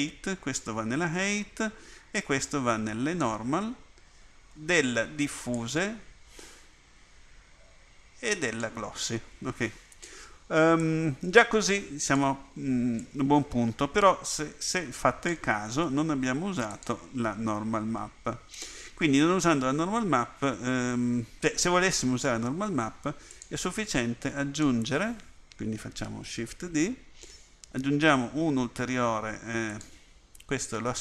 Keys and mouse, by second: 5.7-8.6 drag, 10.9 click, 26.7 click, 26.7 shift+d.